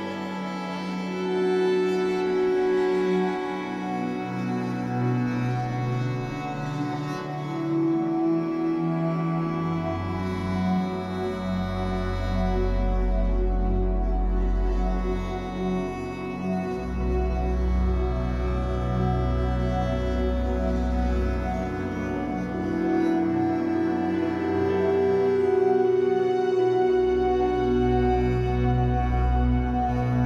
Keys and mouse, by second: 0.0 typing, 1.9 typing, 2.5 click, 4.7 click, 5.5 click, 6.9 click, 8.2-8.6 typing, 9.5 click, 10.3-11.6 typing, 12.8-14.5 drag, 14.1-14.8 typing, 14.9 click, 15.9-16.3 typing, 17.4-19.0 ctrl+alt+drag, 20.6 click, 21.1 click, 22.3 click, 23.9 click, 25.6 click, 27.0 click, 29.6-30.0 typing.